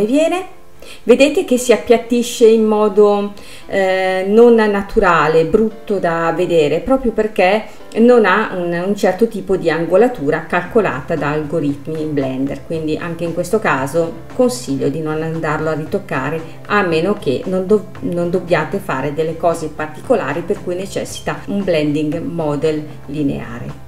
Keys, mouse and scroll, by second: 0.4 space, 0.8-3.8 middle drag, 5.7-8.0 drag, 8.0 space, 8.7 space, 10.6-12.8 drag, 12.8 space, 14.1 space, 15.3-18.3 drag, 18.3 space, 19.4 space.